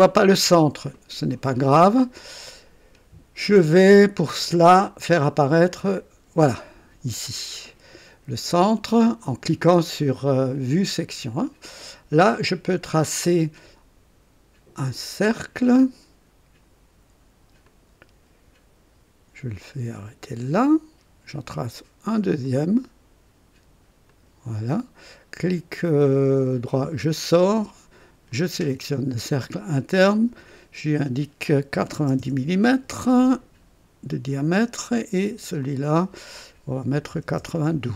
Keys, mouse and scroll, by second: 5.6 click, 15.3 click, 17.6 click, 19.9 click, 22.4 click, 24.0 click, 26.7 right click, 28.3 click, 30.0 click, 31.7 KP_9, 31.9 KP_0, 32.2 KP_Enter, 34.3 click, 35.6 click, 36.8 KP_9, 37.1 KP_2, 37.4 Return, 37.4 KP_Enter.